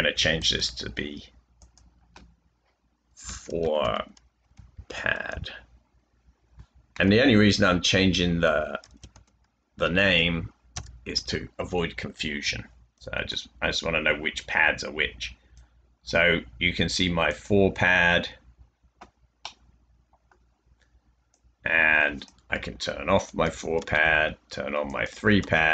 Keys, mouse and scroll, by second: 3.3-5.2 typing, 7.9-9.3 typing, 10.7 Return, 13.8 typing, 16.1 typing, 23.9 space, 25.3-25.7 typing.